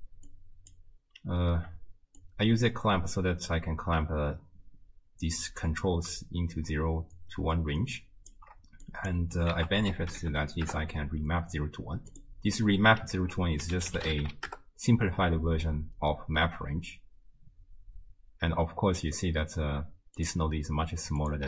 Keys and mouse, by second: 0.3 click, 2.2-8.3 shift+drag, 8.9 click, 9.6 ctrl+a, 13.2 ctrl+a, 21.2 click.